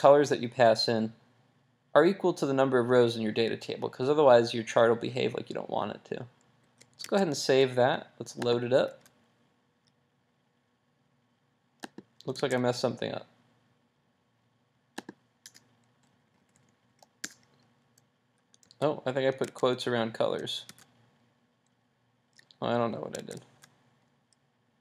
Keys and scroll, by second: 6.6 super+s, 7.2 super+Tab, 8.9 super+r, 11.9 super+r, 12.4 super+Tab, 18.6 super+s, 19.4 super+s, 19.6 super+Tab, 20.7 super+r, 23.1 super+r, 23.3 super+Tab.